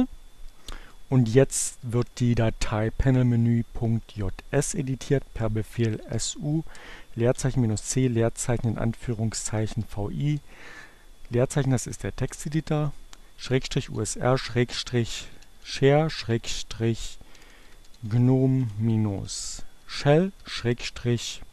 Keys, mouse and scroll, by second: 4.1-4.9 typing, 6.6-7.6 typing, 8.8-9.7 typing, 11.6-17.7 typing, 19.4 l, 20.6 j.